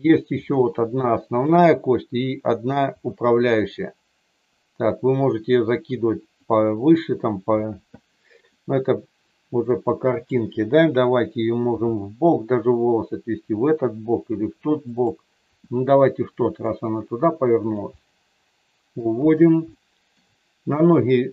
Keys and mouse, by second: 0.4-1.4 middle drag, 2.9 r, 6.2 click, 8.5-10.2 middle drag, 11.8 r, 14.9 click, 15.4 r, 17.9-18.9 middle drag, 19.8 shift+middle click.